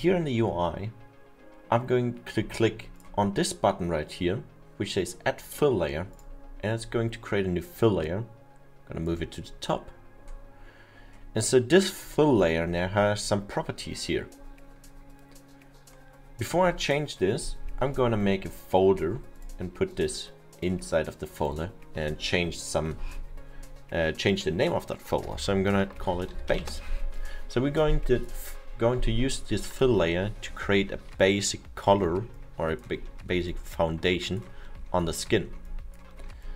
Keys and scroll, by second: 25.3 BackSpace, 26.2 a, 26.6 e, 28.7 Return.